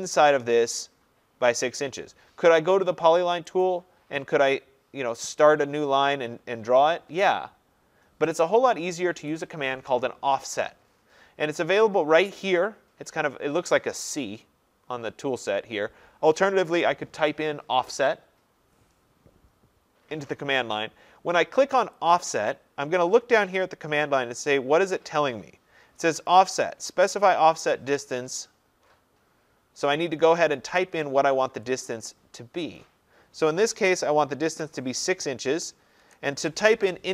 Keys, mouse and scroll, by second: 3.7 click, 5.2-5.6 scroll, 8.8-9.2 scroll, 9.2 Escape, 22.2-27.2 drag, 31.8-34.5 drag, 34.5 6, 36.0 shift+'.